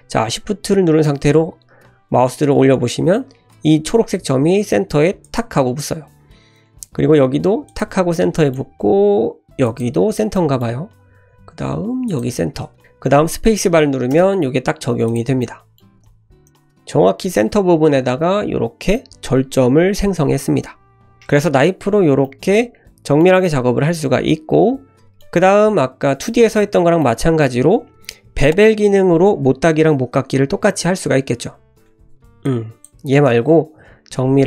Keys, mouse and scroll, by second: 15.1 click, 15.4 middle click, 15.9 scroll up 1, 16.0 middle click, 22.2-23.2 middle drag, 23.9-25.2 middle drag, 25.9-26.2 scroll down 1, 26.3-27.1 middle drag, 31.5-31.8 scroll up 1, 31.8 click, 31.8 middle click, 31.9 Tab, 31.9-32.4 scroll down 3, 32.4-32.8 drag, 33.1 Delete, 33.8 shift+a.